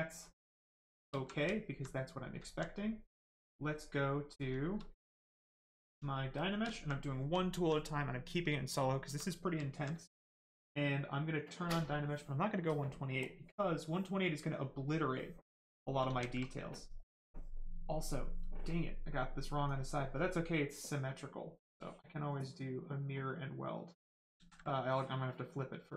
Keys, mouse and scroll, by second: 1.1 alt+right click, 1.4 alt+right click, 1.8 right click, 2.4 alt+right click, 3.6 click, 4.2 right click, 4.4 shift+right click, 5.2 shift+click, 6.3 shift+click, 6.7 alt+right click, 7.2 alt+right click, 7.4 alt+right click, 9.6 alt+right click, 11.6 click, 14.4 right click, 16.0 ctrl+z, 16.4 right click, 18.8 right click, 21.8 click, 24.3 ctrl+z, 24.8 click, 24.9 click.